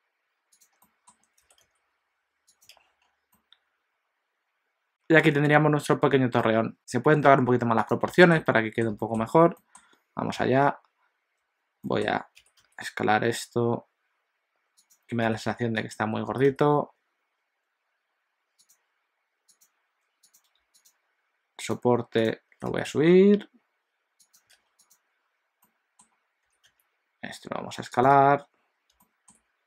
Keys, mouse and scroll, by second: 0.7 click, 0.9 middle click, 1.3 r, 2.8 alt+a, 3.0-3.4 scroll down 3, 3.3 middle click, 6.4 middle click, 6.8 scroll down 1, 7.8 click, 7.8 scroll down 1, 8.2 shift+middle click, 8.5 middle click, 9.1 shift+middle click, 9.2 scroll up 2, 9.6 middle click, 10.4 ., 11.9 middle click, 12.4 s, 16.3 g, 19.6 click, 20.4 click, 20.8 shift+click, 20.9 shift+click, 21.6 click, 22.2 click, 22.7 g, 24.5 alt+a, 24.8 click, 25.6 middle click, 26.5 s, 28.2 alt+a, 29.0 shift+middle click.